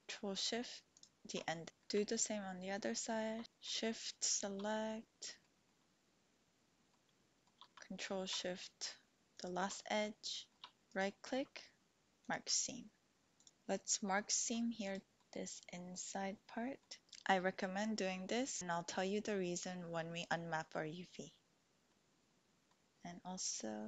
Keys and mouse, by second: 0.9 ctrl+shift+click, 1.7 shift+click, 3.4 ctrl+z, 4.3 shift+click, 4.9 click, 5.7-6.9 drag, 7.1 shift+click, 9.3 ctrl+shift+click, 10.5 shift+click, 11.0-12.3 drag, 13.2 click, 14.7 alt+shift+click, 15.7-16.8 middle drag, 21.9 middle click.